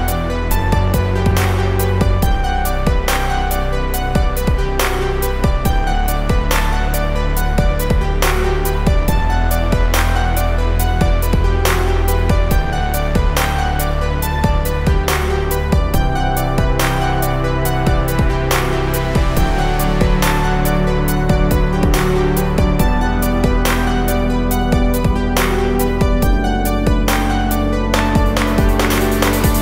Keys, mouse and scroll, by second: 4.0 click, 8.5-11.9 drag, 18.1 click, 24.0 click, 27.6 click.